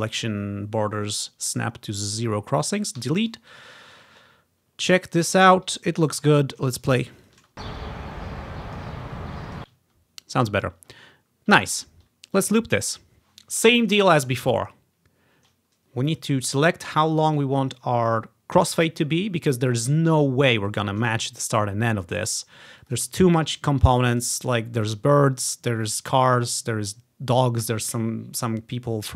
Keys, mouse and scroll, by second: 3.1 Delete, 4.3-4.9 ctrl+scroll up 2, 6.0 ctrl+scroll down 2, 7.1 click, 7.4 space, 8.6 click, 9.5 space, 9.9-10.7 ctrl+scroll down 1, 11.7-12.2 ctrl+scroll up 1, 12.4-14.1 drag, 14.9 ctrl+scroll down 1, 16.2 click, 17.1 click, 22.9 click, 24.2 click.